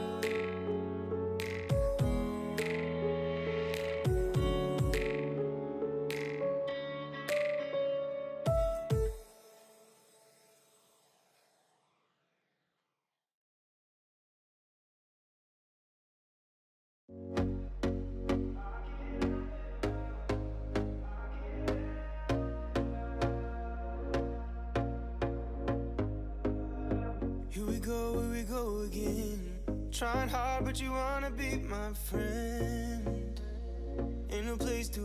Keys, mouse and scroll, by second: 1.6 ctrl+z, 1.8 ctrl+z, 2.4 ctrl+shift+z, 2.7 click, 3.0 Tab, 3.8 shift+middle click, 4.2 KP_3, 4.5 shift+middle click, 4.7 scroll up 3, 4.9 alt+z, 5.5-6.4 drag, 6.4 scroll down 1, 6.6 shift+d, 8.6 g, 9.9 click, 10.2 middle drag, 10.4 Tab, 10.5 click, 10.7 scroll down 1, 10.8 alt+z, 11.0 middle click, 11.2-12.0 scroll up 1, 12.0 click, 12.5-13.7 drag, 13.7-16.0 middle drag, 16.0 click, 16.6 x, 17.3 click, 17.5-18.9 middle drag, 19.7 click, 20.5-21.9 middle drag, 22.3 Tab, 23.2 l, 23.8 p, 24.3 Tab, 24.5 click, 25.1 h, 25.3-27.0 middle drag, 27.0 KP_1, 27.3-27.7 scroll up 3, 27.9 shift+middle drag, 28.2 shift+a, 30.2 shift+middle drag, 30.3 Tab, 30.6-31.3 scroll up 2, 31.3 KP_3, 32.3 KP_1, 32.8 alt+z, 33.0-33.6 shift+middle drag, 33.6-35.0 drag.